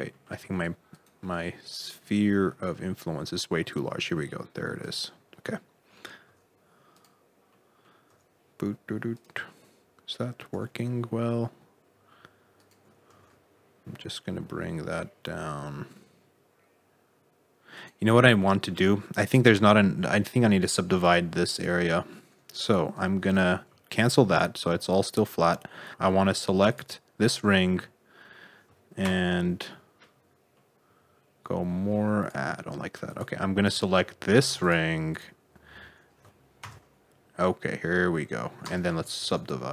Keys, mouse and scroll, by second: 0.0 middle click, 0.4 g, 1.3 g, 5.1-5.8 scroll up 18, 5.8 middle click, 6.2 g, 7.2 scroll down 5, 7.5 middle click, 8.0 g, 9.6 middle click, 10.5 g, 13.0 g, 18.2 middle click, 18.9 scroll down 2, 19.2 middle click, 21.0 right click, 21.5 click, 23.3 2, 24.2 middle click, 25.8 click, 25.9-26.6 scroll down 3, 26.6 alt+click, 29.0 ctrl+KP_Add, 30.2-30.5 scroll down 2, 30.5 middle click, 32.2 click, 33.0 click, 33.7-34.6 scroll up 2, 34.6 click, 35.6 scroll down 3, 36.6 ctrl+KP_Add, 37.3 middle click, 38.6 space.